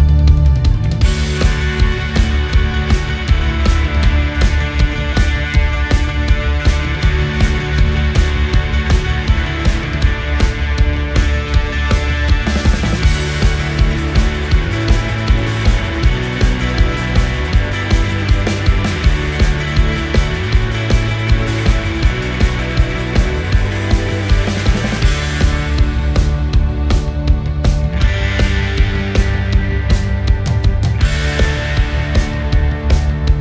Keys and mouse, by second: 2.6-4.2 middle drag, 14.1-15.8 middle drag, 16.6 shift+middle click, 17.5 shift+middle click, 17.8-18.7 middle drag, 18.9 shift+middle drag, 19.9-23.4 middle drag, 24.3 shift+middle click, 24.8-26.8 middle drag, 27.3-27.8 shift+middle drag, 28.4 middle click, 29.8 click, 33.0 shift+d.